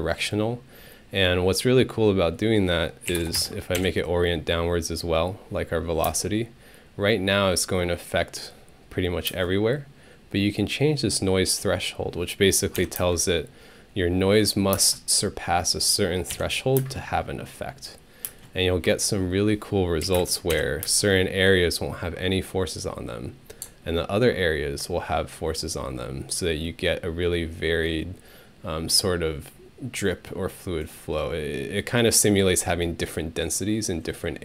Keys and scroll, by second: 2.9-3.7 typing, 3.8 Home, 6.1 space, 9.3 space, 12.8 Home, 13.0 space, 14.7 space, 16.3 Home, 16.8 space, 18.3 space, 20.0 3, 20.2 Return, 20.5 Home, 20.8 space.